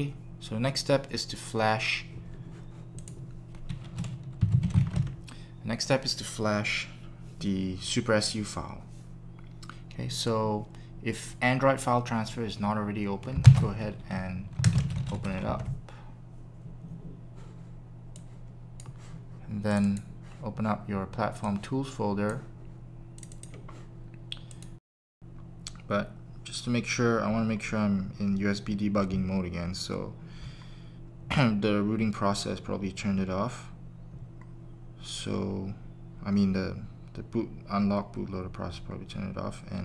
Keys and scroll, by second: 4.1-5.3 typing, 13.4 ctrl+space.